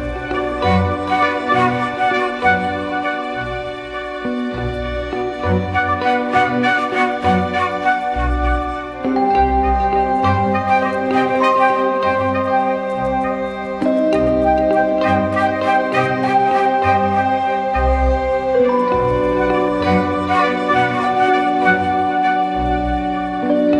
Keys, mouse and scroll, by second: 18.2 double click, 21.7 ctrl+-.